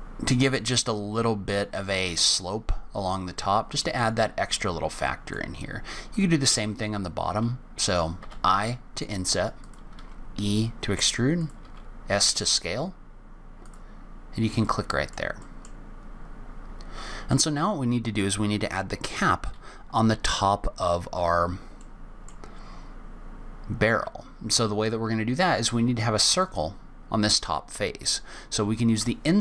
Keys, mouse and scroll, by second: 3.0-3.3 scroll down 2, 3.3 middle click, 4.1-5.7 scroll down 7, 5.0 middle click, 5.7-6.1 scroll up 2, 6.1 click, 6.6-8.0 scroll up 2, 8.2 i, 9.9 e, 11.6 s, 14.6 middle click, 15.4 middle click, 15.7-16.7 scroll down 6, 16.4-17.3 scroll up 7, 17.3 middle click, 18.2-19.2 scroll up 1, 21.7 middle click, 22.6-23.1 scroll down 2, 23.1-24.9 scroll up 1, 26.3 click.